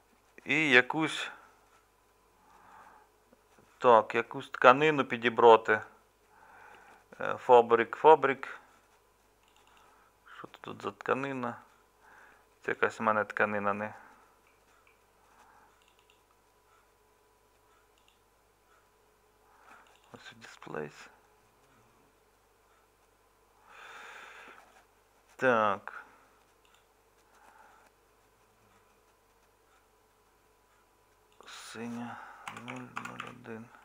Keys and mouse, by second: 24.5-33.8 middle drag.